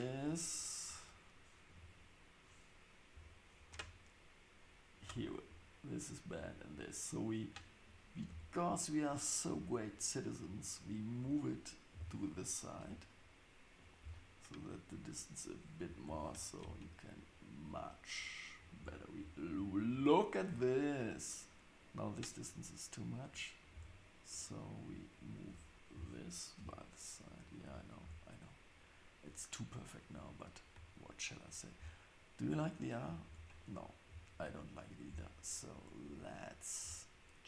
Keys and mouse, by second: 1.7 KP_7, 3.1 KP_3, 8.3 Tab, 9.2-14.0 drag, 11.9 g, 14.7-18.8 drag, 16.1 g, 18.8 Tab, 23.4 click, 23.7 Tab, 24.4-27.6 drag, 25.9 g, 28.0 Tab, 33.3 Tab.